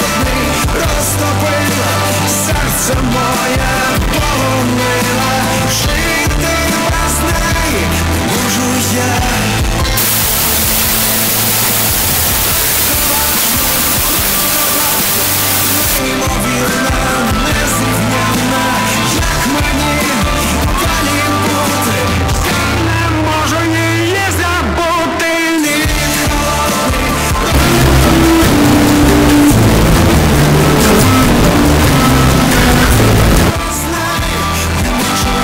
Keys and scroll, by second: 0.1 Up, 0.3 Up, 0.4 Return, 16.1 Page_Down, 33.4 Page_Down.